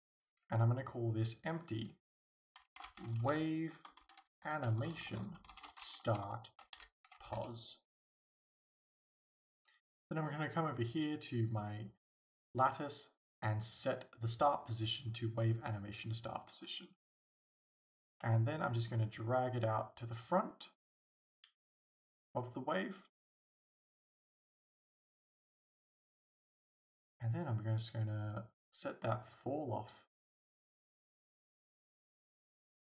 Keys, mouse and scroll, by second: 2.9-9.7 drag, 7.5 Return, 9.7-12.6 right drag, 12.7-17.5 drag, 17.5 right click, 18.3 g, 21.5 click, 23.5 alt+a, 24.9 alt+a, 26.0 right click, 31.1-32.8 drag.